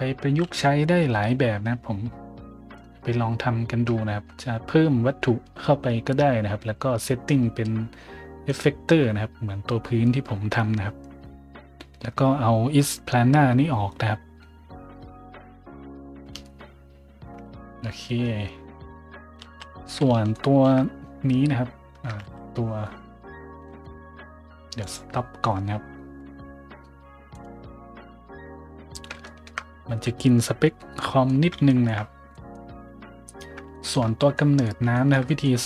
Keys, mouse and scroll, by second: 8.4 right click, 19.4 z, 20.3 shift+middle drag, 20.9-21.5 middle drag, 22.2 z, 22.4 middle click, 24.8 click, 27.3 click, 29.0 middle click, 29.2 shift+middle drag, 29.6 middle drag, 29.9 a, 31.0 middle drag, 31.6 shift+middle drag, 32.3 middle drag, 33.2 right click, 33.7 shift+middle drag, 34.4 middle drag, 34.9 shift+middle drag, 35.2 middle drag.